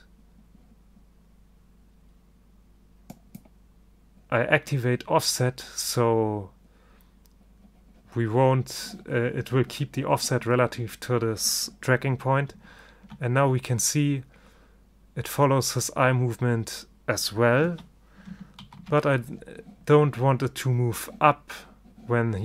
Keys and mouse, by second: 3.2-5.1 drag, 13.0 alt+a, 17.8 alt+a, 18.7 ctrl+shift+i.